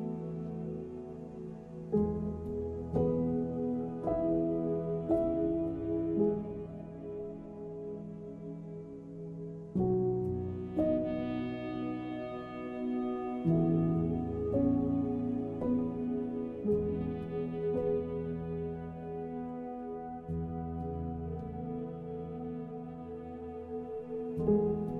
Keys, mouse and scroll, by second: 0.1 middle click, 0.7 Tab, 1.3 ctrl+r, 2.6 middle click, 3.1 ctrl+b, 4.7 right click, 5.5 alt+click, 5.9 alt+shift+click, 6.1 middle click, 7.1 s, 8.0 middle click, 10.3 e, 11.0 s, 12.4 e, 12.7 s, 13.4 middle click, 15.8 alt+click, 16.1 middle click, 16.7 alt+shift+click, 17.1 middle click, 17.4 s, 17.9 middle click, 18.6 click, 19.7 middle click, 20.5 ctrl+z, 21.1 s, 22.3 middle click, 22.6 s, 23.2 middle click, 24.1 alt+click, 24.7 alt+click.